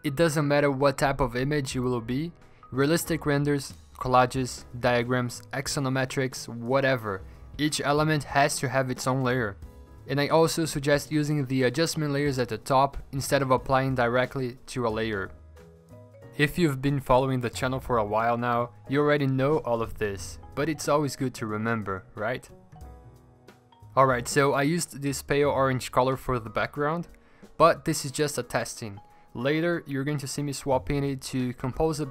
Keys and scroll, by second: 1.0 typing, 2.3-3.0 typing, 4.7-5.7 typing, 7.0 alt+BackSpace, 8.5 v, 12.0 3, 14.6-15.7 typing, 17.1 p, 28.2 v, 29.4 p.